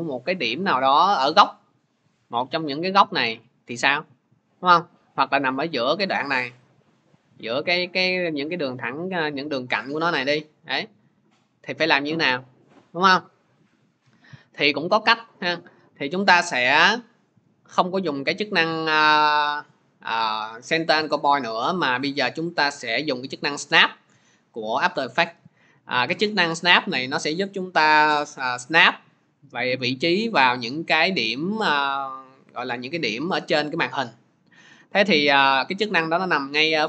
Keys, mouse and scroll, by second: 13.1-26.7 drag.